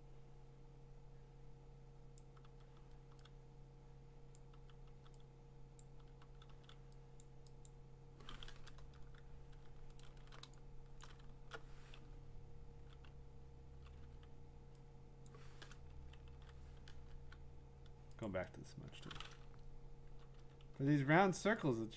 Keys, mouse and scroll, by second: 2.2 click, 2.4 [, 2.7 [, 3.1 [, 4.3 click, 4.5 [, 4.9 [, 5.8 click, 6.0 [, 6.2 [, 6.5 [, 7.2 click, 7.7 click, 9.6-10.4 scroll, 10.4 middle click, 11.0 click, 12.0-12.9 ], 12.7 scroll, 13.1-13.9 ], 14.0 ], 15.3 click, 16.3 ctrl+z, 17.1 r, 18.2 click, 19.4-21.3 drag, 19.4-20.2 ], 20.5 ], 20.7 [.